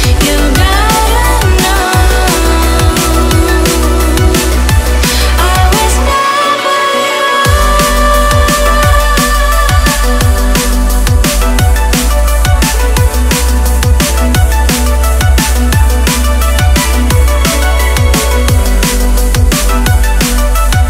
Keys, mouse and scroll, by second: 0.0 BackSpace, 2.8 click, 3.8 click, 7.1 click, 9.0 click, 10.7-11.1 scroll up 3, 11.3 click, 17.8 click, 19.0 click, 19.9 click.